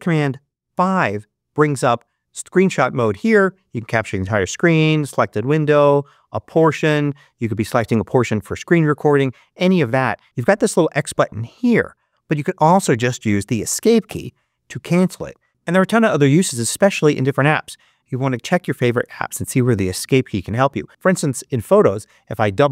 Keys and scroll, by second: 13.9 Escape.